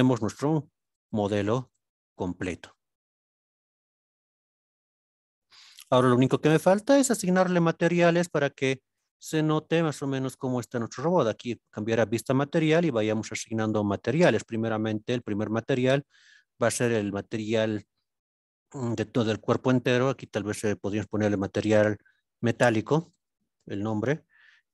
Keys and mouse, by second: 0.9 alt+z, 1.8 alt+z, 3.7-6.6 middle drag, 7.3-7.7 shift+middle drag, 9.2 click, 13.6 click, 15.1-18.7 drag, 20.2 click, 20.9 shift+middle click, 21.3-24.3 drag.